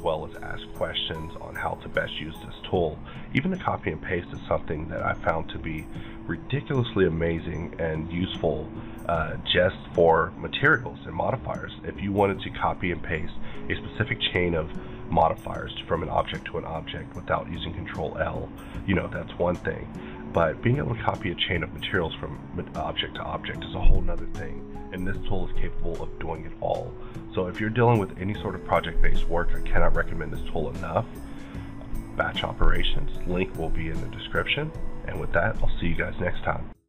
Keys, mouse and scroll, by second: 30.3-31.6 scroll up 4, 31.6 click.